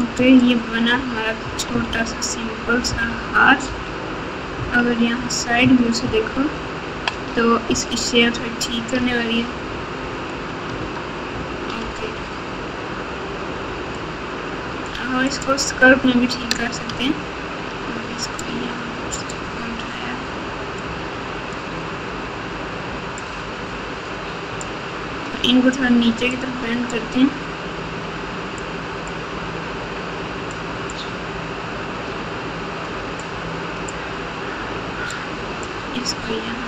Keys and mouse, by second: 0.1 click, 0.9 Tab, 1.8 alt+z, 2.8 KP_2, 3.0 KP_2, 3.6 KP_2, 4.5 KP_1, 6.0-7.1 ctrl+KP_8, 9.0 alt+z, 9.9 alt+z, 10.7 Tab, 11.8 alt+z, 13.9 click, 14.4 click, 15.2 click, 16.1 alt+z, 16.8 Tab, 18.5 click, 20.9 click, 23.1-26.2 drag, 26.3 click, 28.5 click, 30.5 click, 33.2 click, 35.1 click.